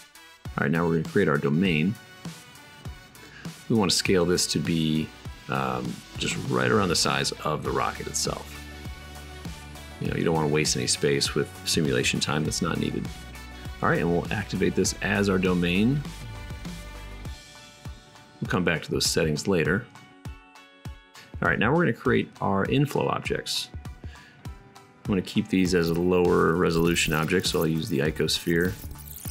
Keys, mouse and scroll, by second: 2.1-4.4 shift+drag, 2.1 shift+a, 4.6 drag, 5.6 g, 6.3-7.0 drag, 7.1-9.6 middle drag, 10.1-12.4 middle drag, 11.1 g, 12.6 right click, 13.4 drag, 13.9-17.1 right drag, 17.1-20.7 middle drag, 21.0 shift+a, 23.7 s, 26.0 s, 26.4 g, 26.7 click, 27.0-28.1 middle drag, 28.1 click, 28.8-29.3 middle drag.